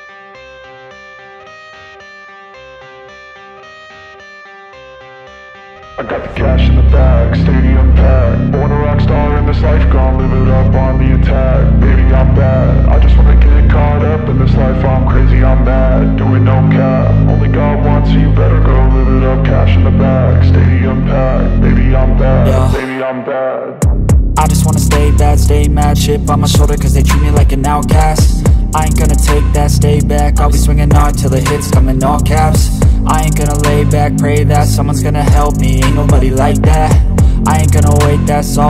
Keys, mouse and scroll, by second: 0.0 alt+middle click, 0.4 scroll down 1, 0.7 alt+click, 1.6 alt+click, 2.0 scroll up 1, 2.2 alt+middle click, 2.5 alt+click, 3.1 alt+middle click, 3.3 alt+scroll down 1, 3.4 alt+click, 4.4-5.1 alt+scroll down 1, 5.6 scroll up 1, 5.9 alt+middle click, 6.1 alt+click, 7.8 scroll down 1, 8.8 alt+middle click, 9.0 alt+click, 9.5 alt+middle click, 10.6 scroll down 1, 10.7 alt+click, 11.4 scroll down 1, 11.6 alt+middle click, 12.1-12.8 scroll up 1, 12.8 alt+middle click, 13.5 scroll down 1, 13.6 alt+middle click, 14.0 scroll up 1, 14.3 alt+middle click, 14.5 scroll up 1, 14.8 alt+click, 15.1 alt+scroll up 2, 15.9-16.8 typing, 19.9 alt+click, 22.2-23.4 typing, 24.0-24.4 scroll down 1, 24.5 alt+middle click, 25.1-26.3 scroll up 1, 26.7-28.0 typing, 28.8-29.2 scroll down 1, 29.5 alt+click, 32.2 alt+click, 33.4-33.8 scroll down 1, 33.8 alt+click, 35.2 alt+middle click, 35.4 scroll down 1, 35.5 alt+click.